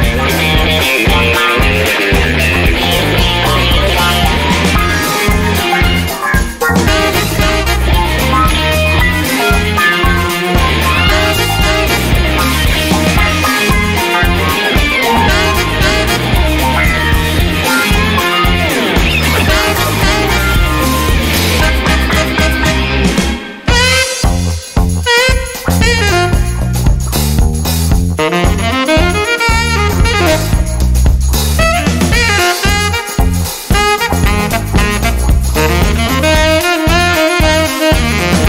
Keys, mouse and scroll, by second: 0.4 click, 1.4 click, 4.0 click, 5.1 click, 6.7 BackSpace, 8.5 click, 9.9 0, 12.2 click, 13.2 click, 14.2 0, 14.9 click, 15.3 1, 15.9 click, 16.8 click, 18.8 click, 21.4 click, 22.7 click, 24.4 click, 25.8 click, 27.5 click, 28.2 click, 30.0 click, 31.3 click, 32.9 click, 33.6 click, 35.2 BackSpace, 36.0 click, 37.4 0.